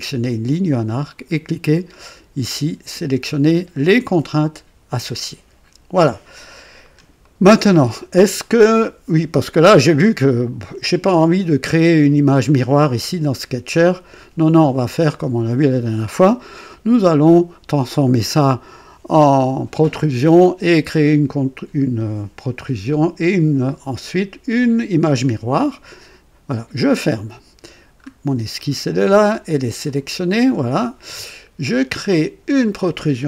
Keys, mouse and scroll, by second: 6.7 scroll down 2, 7.2 right click, 26.5 click, 27.9-28.3 scroll up 2, 28.5 right click, 29.8 click, 32.0 click.